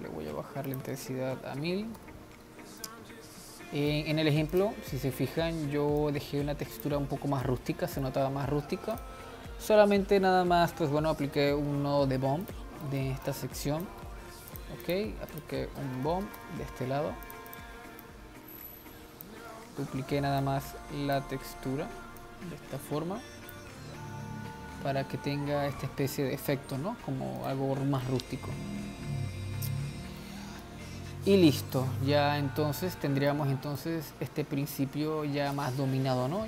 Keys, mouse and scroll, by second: 0.9 click, 1.9 0, 2.0 0, 3.2-4.5 middle drag, 4.5 scroll up 2, 4.8 click, 6.3-7.8 drag, 7.8-9.2 middle drag, 9.2 click, 11.7 shift+d, 13.1 middle click, 13.5 click, 14.3 g, 15.4 shift+a, 17.7 drag, 18.2 drag, 20.7 click, 22.5 click, 24.8 scroll up 2, 26.4-27.7 scroll up 1, 27.7 click, 30.5-36.1 middle drag, 36.1-36.4 scroll down 1.